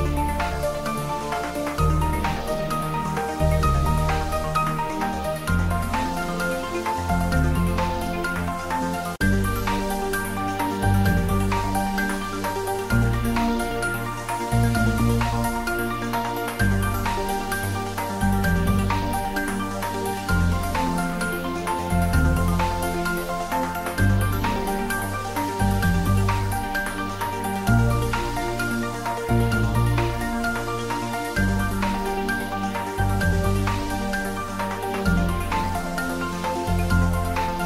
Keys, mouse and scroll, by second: 2.1 click, 5.2 click, 6.4-9.9 drag, 11.3 click, 15.2 click, 17.2 click, 18.9 click, 21.4 click, 22.8 ctrl+s, 24.1 ctrl+s, 27.8 click, 28.5 shift+a, 28.8 shift+click, 29.3 shift+c, 30.1 shift+click, 31.0 ctrl+middle click, 32.4-33.8 ctrl+middle drag, 33.8 click, 36.2 click.